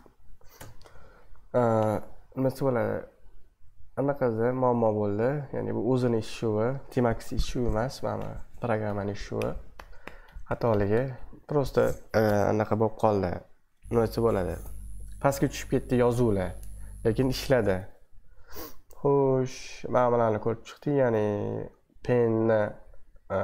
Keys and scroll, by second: 0.0-1.0 typing, 17.9 super+2, 22.6 super+2.